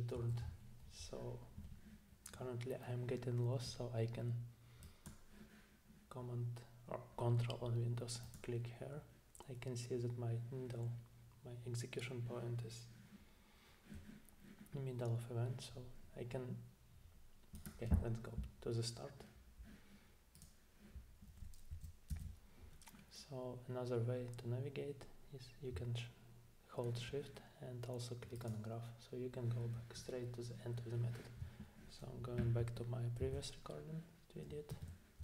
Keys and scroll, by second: 21.7 Down, 22.1 Down, 32.4 super+Tab, 33.2 super+Tab, 34.7 super+`.